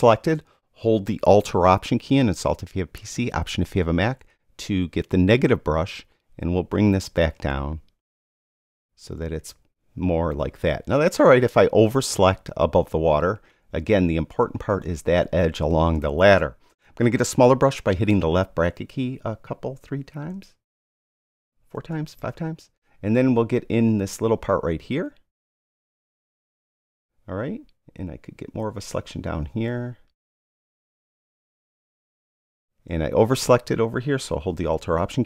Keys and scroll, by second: 18.1 [, 20.3 [.